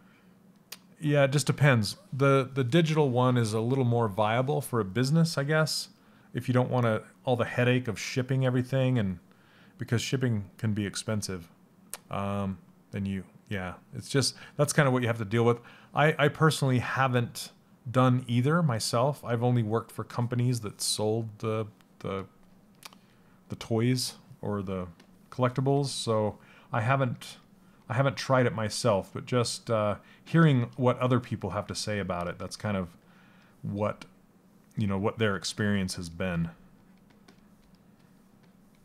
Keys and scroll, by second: 31.7 s.